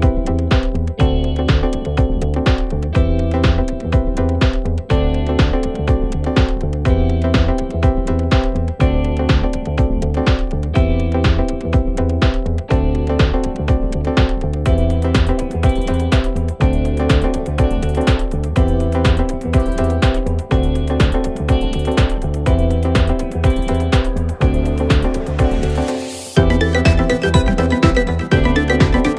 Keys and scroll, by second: 0.6 ctrl+z, 6.8 4, 7.3 3, 10.9 4, 12.6 9, 12.7 Return, 12.9 shift+i, 13.3 3, 17.4 Delete, 22.1 ctrl+d, 22.2 Escape.